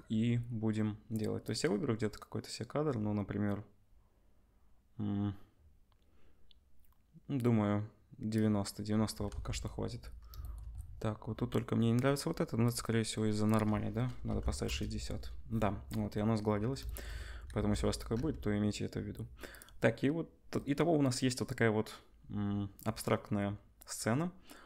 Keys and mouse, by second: 1.5-12.7 drag, 9.3 ctrl+s, 12.7-13.5 middle drag, 13.5-19.5 drag, 17.5 ctrl+s, 18.1 z, 19.5-24.6 middle drag.